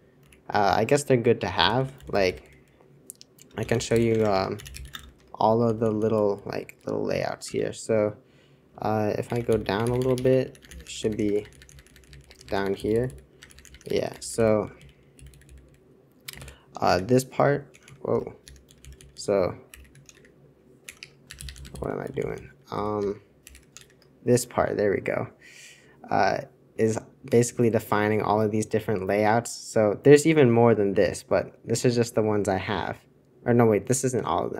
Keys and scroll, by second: 1.6 super+c, 1.6 super+h, 1.7 super+h, 1.9 super+l, 2.1 super+l, 2.4 super+l, 3.1-6.0 typing, 7.1 Return, 7.1-23.7 typing.